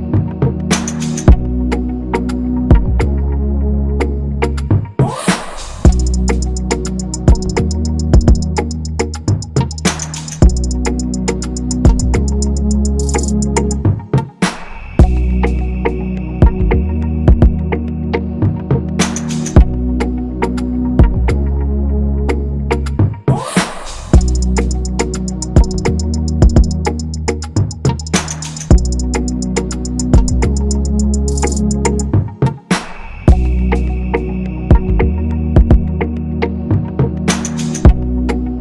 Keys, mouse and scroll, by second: 0.9 Left, 1.8 shift+Down, 4.5 Left, 4.9 Left, 6.1 Left, 6.5 Left, 7.7 Right, 9.1 Left, 9.3 Left, 9.9 Left, 10.3 Right, 10.4 Right, 10.5 Right, 10.7 Right, 11.7 ctrl+-, 11.9 ctrl+-, 14.0 Right, 14.1 Right, 14.2 Right, 14.3 Right, 17.0 ctrl+c, 17.8 ctrl+f.